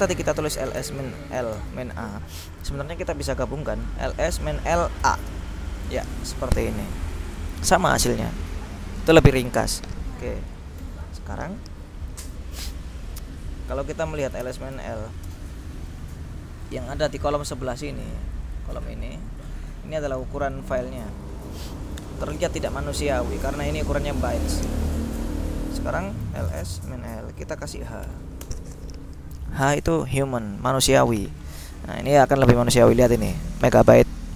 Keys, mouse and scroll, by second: 0.2-2.4 typing, 3.9 BackSpace, 5.1 a, 5.3 Return, 6.9-10.3 scroll up 2, 10.8 ctrl+l, 14.1-15.4 typing, 17.5-21.2 drag, 21.4-22.5 drag, 22.6-24.6 drag, 25.0 ctrl+l, 26.1-28.1 typing, 28.6 Return, 30.6 click, 32.1 click, 33.3-34.3 drag.